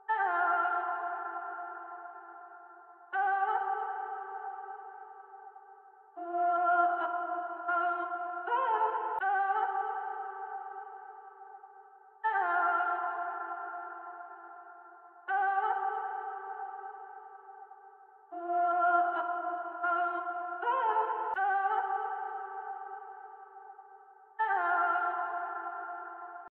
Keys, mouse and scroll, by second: 2.0 ctrl+k, 3.7 ctrl+c, 6.7 ctrl+k, 8.4 ctrl+u, 10.7 ctrl+k, 15.3 ctrl+k, 17.1 ctrl+c, 19.2 ctrl+k, 22.7 ctrl+k, 23.9 ctrl+u.